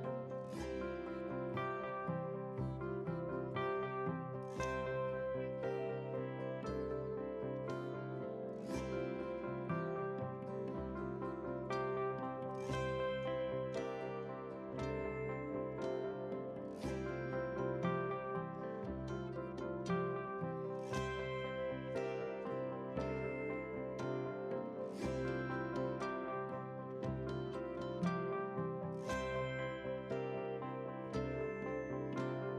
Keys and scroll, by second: 18.6 ctrl+t, 28.8 ctrl+w.